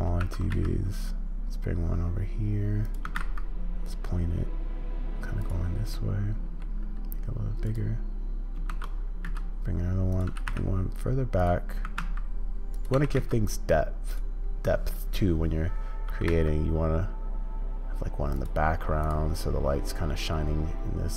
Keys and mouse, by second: 0.2 shift+d, 3.0 r, 6.0-8.5 middle drag, 8.7 shift+d, 10.3 g, 11.8 r, 12.9 g.